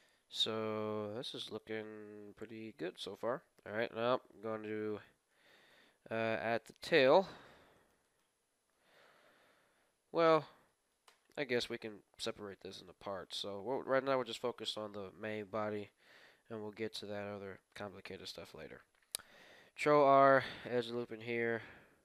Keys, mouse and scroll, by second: 0.4-2.0 middle drag, 3.7 KP_3, 4.0-7.2 middle drag, 5.7 Tab, 6.6-9.8 right drag, 8.9 middle click, 10.0 middle click, 10.7-14.0 middle drag, 11.1 a, 15.4 KP_1, 16.2-20.2 middle drag, 19.2 ctrl+r, 21.8 ctrl+b.